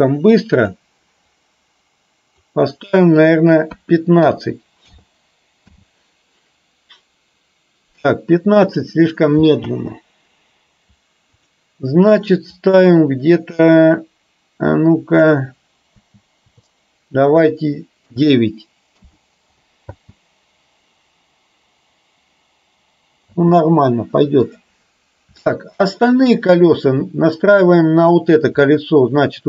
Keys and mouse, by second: 5.7 space, 9.7 space, 11.5-19.2 drag, 20.0 space, 23.4 space, 25.5-25.9 shift+middle drag.